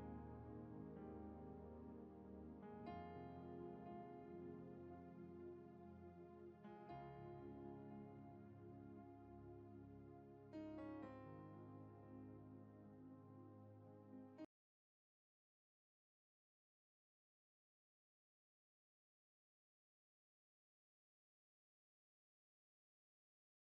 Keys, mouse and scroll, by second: 0.8-3.4 drag, 3.4 Return, 4.1 click, 7.4 click.